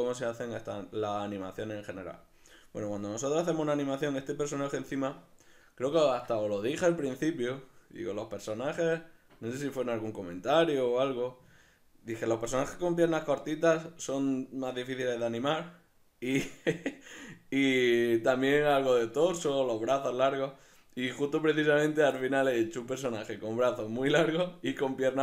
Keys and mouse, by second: 21.4 right click.